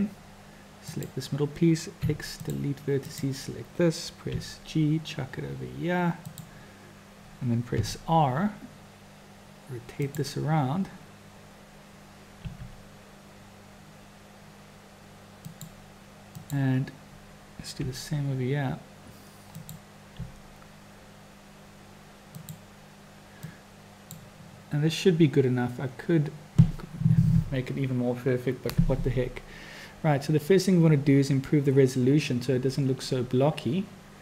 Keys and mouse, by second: 0.8 click, 2.0 x, 4.3 g, 7.8 r, 12.4 g, 16.4 click, 17.8 r, 20.2 g, 23.5 click.